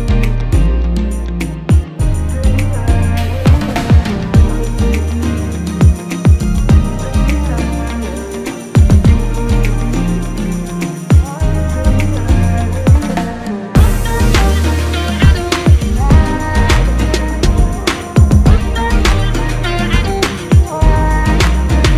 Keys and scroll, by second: 2.4 ctrl+alt+shift+x, 2.8 ctrl+f, 4.9 ctrl+x, 8.1 ctrl+f, 12.2 ctrl+x, 12.6 ctrl+f, 17.9 alt+shift+Down.